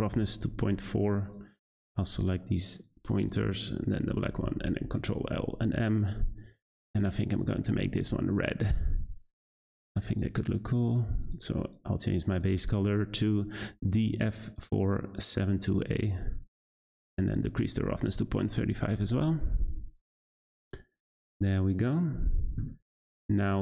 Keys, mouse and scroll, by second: 1.8 shift+click, 2.7 shift+click, 4.1 ctrl+l, 5.9 click, 6.9-11.7 drag, 17.6-20.0 drag, 20.5 scroll down 1, 21.1-21.8 scroll down 1, 21.8-23.6 scroll up 1.